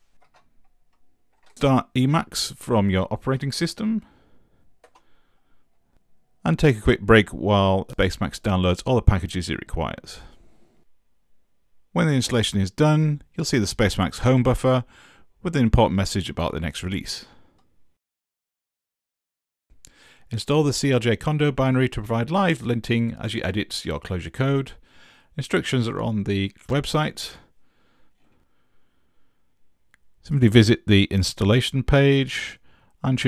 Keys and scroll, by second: 0.2 super+space, 1.3 s, 4.8 Return.